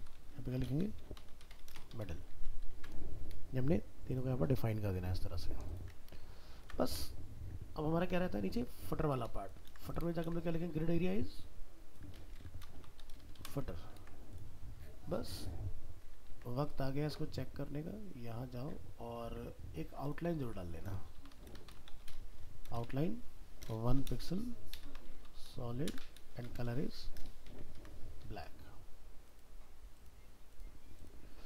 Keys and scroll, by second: 2.5 ctrl+s, 6.3 ctrl+s, 10.1 ctrl+c, 10.2 ctrl+v, 13.7 ctrl+s, 27.8 ctrl+s.